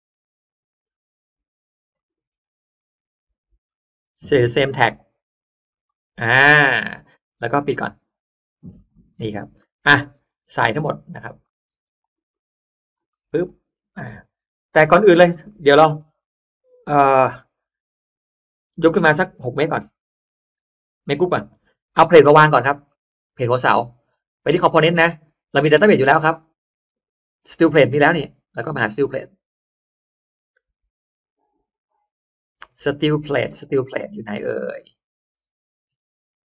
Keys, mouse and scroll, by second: 0.7 click, 1.9 click, 2.9 right click, 4.5 click, 5.7 click, 6.3 middle click, 6.5-7.1 scroll down 1, 7.1 space, 7.2-7.5 scroll up 1, 7.7 click, 7.7 space, 8.7 click, 9.0-9.5 scroll up 1, 9.5 middle click, 9.8-10.2 scroll up 1, 10.3 middle click, 10.3 space, 10.5 click, 10.5-11.1 scroll up 1, 10.6 space, 11.3 middle click, 11.3-11.7 scroll up 1, 11.7 space, 11.9 click, 12.2 click, 13.1 scroll up 1, 13.5 middle click, 14.1 scroll up 1, 14.7 scroll up 1, 14.9-15.5 scroll down 1, 15.3 middle click, 15.8 m, 16.1 click, 19.7 6, 20.4 6, 20.5 Return, 21.5 g, 22.6-23.3 middle drag, 23.5 click, 24.9 click, 26.3 click, 28.3-28.8 drag, 29.2-36.4 drag.